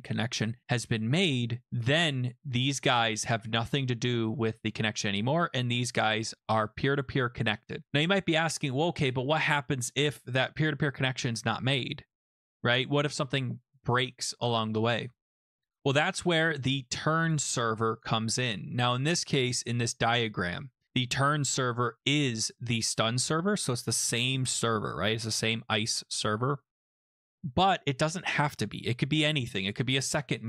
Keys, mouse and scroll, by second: 2.3 click, 17.3 click, 17.5 click.